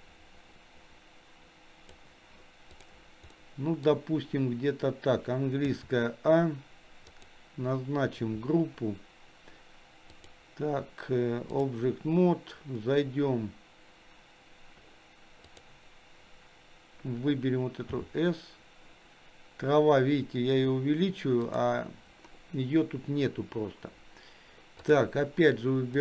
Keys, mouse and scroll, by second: 2.7 click, 3.3 middle click, 5.7 a, 7.1 click, 10.2-11.8 drag, 15.5 click, 17.9 s, 24.9-26.0 drag.